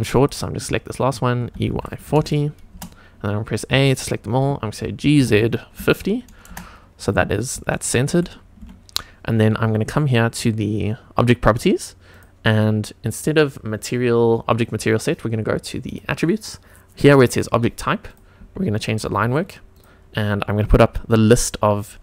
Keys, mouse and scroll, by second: 0.1 click, 1.5 e, 1.7 y, 2.0 KP_4, 2.1 KP_0, 2.7 Return, 3.6 a, 5.0 g, 5.1 z, 5.7 KP_5, 5.8 KP_0, 6.4 Return, 7.2-7.5 scroll down 2, 7.7 shift+middle click, 8.6 Tab, 12.1 click, 15.8 click, 18.0 click, 18.7 click, 19.7-22.0 drag.